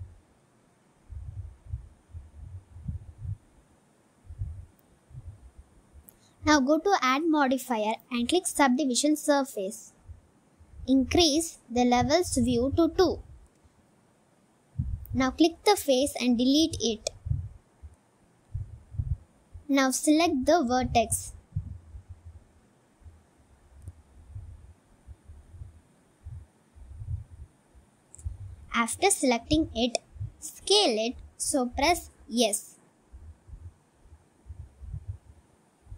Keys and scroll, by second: 1.3 s, 3.0 g, 3.2 z, 5.9 Tab, 15.5 Tab, 17.2 Delete, 19.3 7.